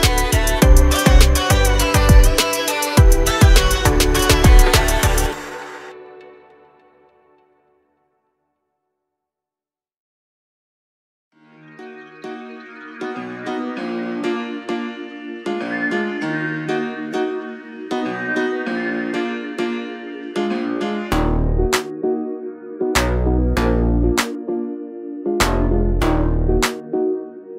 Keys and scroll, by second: 0.0-0.6 typing, 4.7 r, 7.0-10.1 typing, 12.3 space, 13.8 m, 14.2 Up, 15.0-17.6 typing, 15.2 Return, 17.4 Return, 21.0 m, 24.5 Up, 25.8 Up, 26.4 2, 26.6 Return.